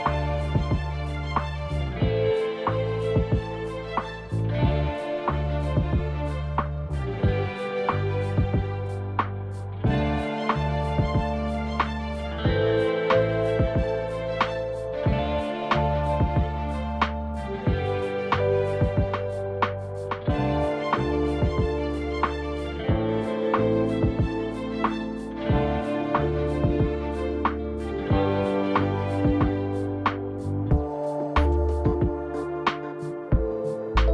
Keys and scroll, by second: 26.3 ctrl+z.